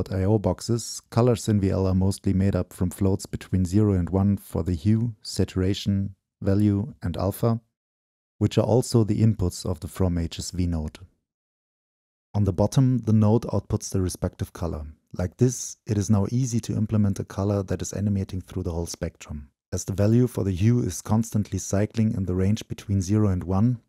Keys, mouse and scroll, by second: 0.3-1.1 drag, 1.7-3.3 drag, 4.0-4.7 drag, 5.4-6.0 drag, 6.2-8.9 shift+drag, 9.3 right click, 9.5 middle click, 9.6-12.2 right drag, 12.2-13.6 drag, 13.6 right click, 13.8 middle click, 14.5-15.9 drag, 15.9 right click, 16.9-20.3 drag, 21.1 click.